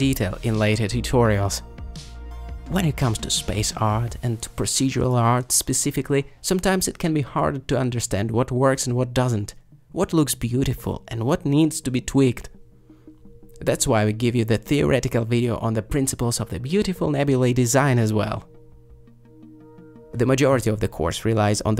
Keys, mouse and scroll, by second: 20.2-21.7 drag.